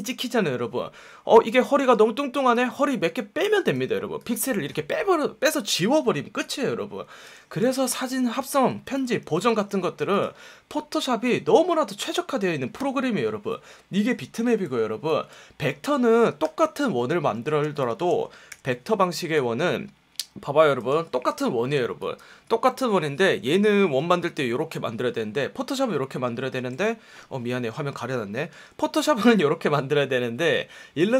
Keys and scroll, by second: 27.1 F1, 28.5 F1.